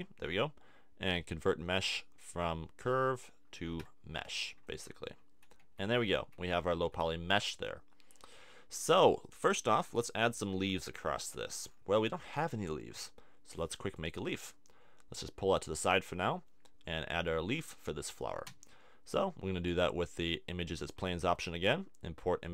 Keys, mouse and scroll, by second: 3.8 Tab, 4.2 middle click, 5.6 a, 6.2 a, 6.8 Tab, 14.0-15.8 drag, 16.7 middle click, 18.5 shift+a.